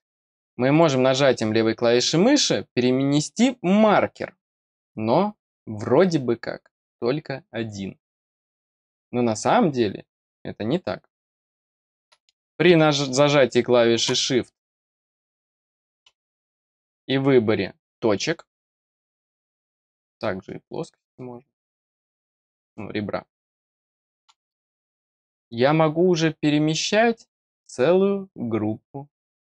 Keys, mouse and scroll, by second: 0.7 click, 4.4 click, 15.3 click, 16.8 click, 18.2 click, 19.7 click, 20.8 click, 22.2 click, 23.5 click, 24.9 click.